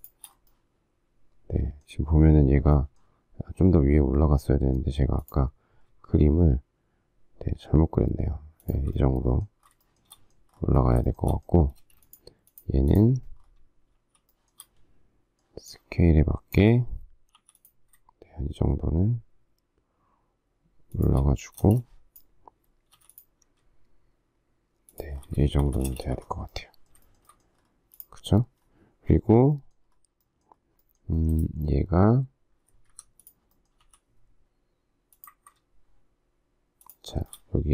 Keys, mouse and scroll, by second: 8.6 shift+click, 9.8 shift+middle click, 11.0 shift+middle click, 12.5 shift+middle click, 12.9 space, 13.9 shift+s, 14.3 shift+middle click, 17.3 m, 20.9 shift+click, 21.6 space, 22.9 m, 24.9 shift+click, 25.4 space, 25.6 Escape, 26.1 Escape, 27.0 shift+middle click, 33.0 Escape, 33.9 m, 36.8 shift+click, 37.0 shift+middle click.